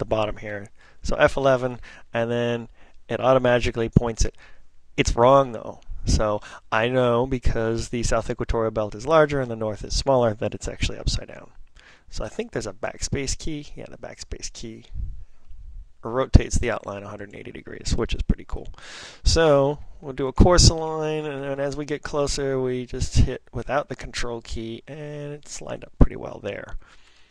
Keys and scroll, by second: 1.0 F11, 11.9 ctrl+n, 12.4 ctrl+n, 12.4 ctrl+n, 12.5 ctrl+n, 19.3 ctrl+n, 19.8 ctrl+p, 20.3 ctrl+p, 20.4 ctrl+p, 20.5 ctrl+p, 20.7 ctrl+p, 20.9 ctrl+p, 23.2-25.2 typing.